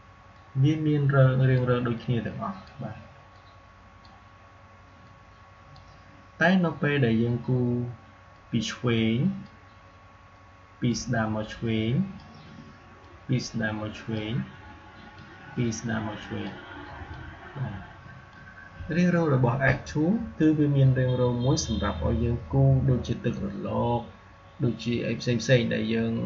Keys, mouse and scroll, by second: 0.2 click, 0.6-8.2 drag, 8.2-20.6 drag.